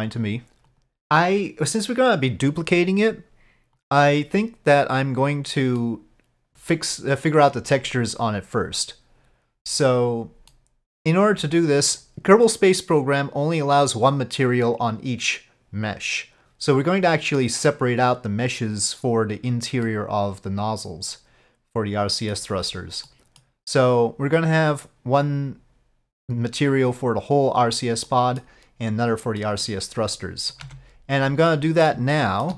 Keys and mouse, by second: 5.9-7.0 middle drag, 10.6-11.5 middle drag, 20.0-22.4 middle drag, 23.1-23.5 middle drag, 28.1-28.5 middle drag, 29.5 middle click, 30.2-30.6 middle drag, 30.7 Tab, 31.6 middle click, 32.2 shift+middle click.